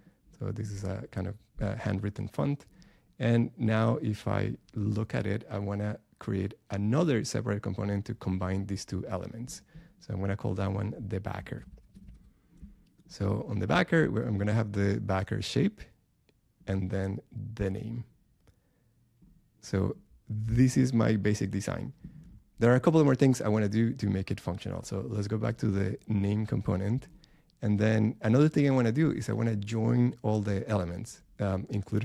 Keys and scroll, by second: 11.9 BackSpace.